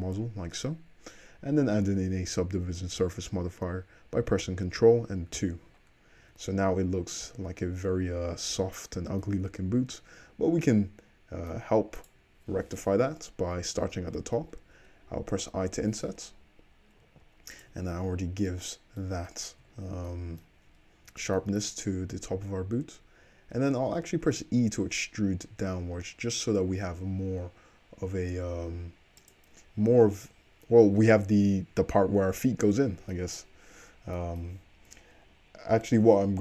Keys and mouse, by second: 5.4 ctrl+2, 6.2 `, 7.9 `, 8.7 shift+middle drag, 9.9 Tab, 12.0 click, 15.3 i, 17.7-24.3 middle drag, 24.3 e, 32.8-36.4 middle drag.